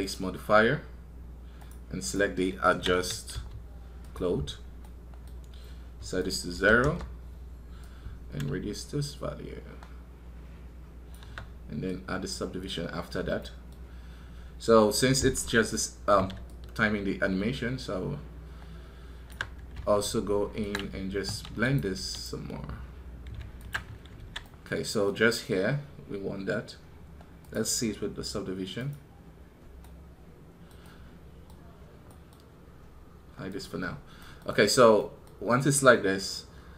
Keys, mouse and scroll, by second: 4.7-36.7 middle drag.